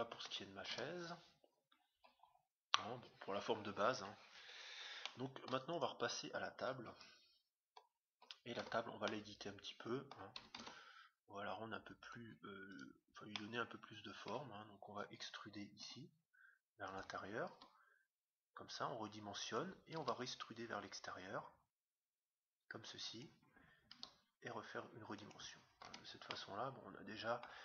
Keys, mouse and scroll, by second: 0.7 Tab, 1.3-4.2 middle drag, 1.3-1.8 scroll up 1, 3.5-3.9 scroll up 1, 4.2-4.5 scroll down 1, 5.1-6.6 middle drag, 5.7-7.3 right drag, 6.9 KP_7, 7.6-8.2 scroll up 1, 8.2 middle click, 8.8 Tab, 10.5 ctrl+Tab, 12.7-14.3 right drag, 13.2-15.2 middle drag, 16.0 e, 17.5 s, 20.3 e, 23.9 s, 25.9 Tab, 26.3-27.6 middle drag.